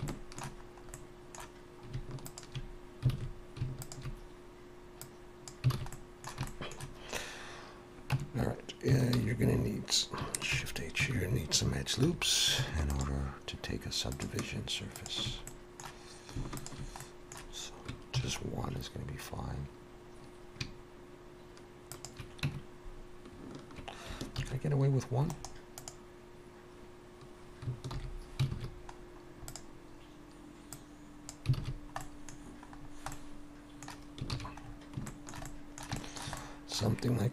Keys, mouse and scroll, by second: 0.1 shift+middle click, 0.7 scroll up 1, 0.9 middle click, 2.3 alt+shift+click, 3.1 alt+a, 3.8 alt+shift+click, 5.0 click, 5.7 alt+a, 5.9 middle click, 6.5 shift+middle click, 8.1 Tab, 9.2 alt+h, 10.5 shift+h, 11.0 Tab, 12.0 2, 12.8 alt+shift+click, 15.5 middle click, 16.6 alt+shift+click, 17.0 middle click, 18.2 ctrl+b, 22.4 Tab, 24.4 ctrl+1, 25.3 right click, 27.9 alt+h, 28.6 alt+a, 29.0 scroll down 1, 29.5 click, 31.5 click, 31.6 alt+a, 31.7 scroll down 1, 32.0 middle click, 32.4-32.8 scroll down 2, 33.1 middle click, 33.1-33.6 scroll down 3, 34.4 ctrl+s, 34.6 scroll up 4, 35.1 shift+middle click, 35.4 middle click, 36.0 shift+middle click, 36.4 middle click.